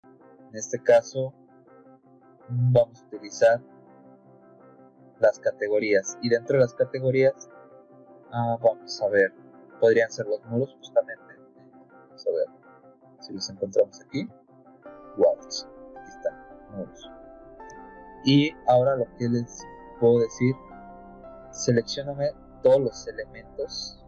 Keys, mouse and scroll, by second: 7.0 click, 21.4 click, 23.1 click.